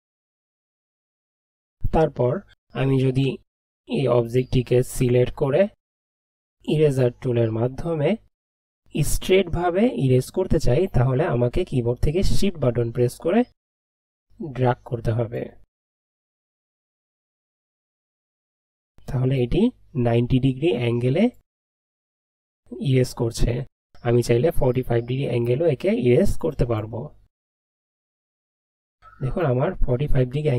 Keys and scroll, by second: 0.0-0.5 typing.